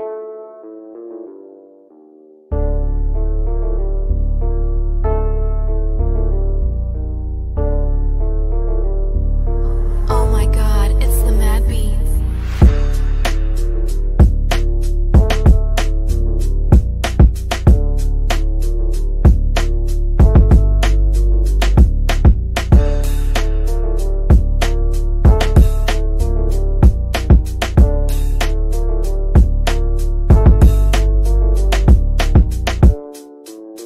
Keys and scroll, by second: 11.1 F3.